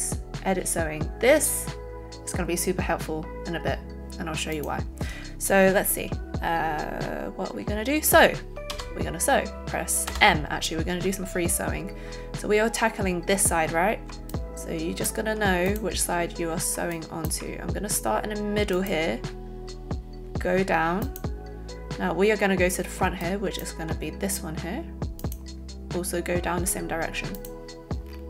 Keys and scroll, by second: 10.0 m.